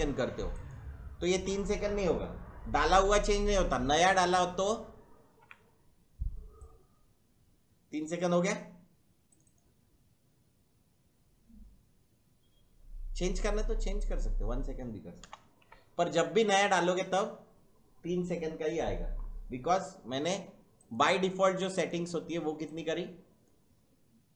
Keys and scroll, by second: 5.2 ctrl+k, 15.2 BackSpace, 15.6 1.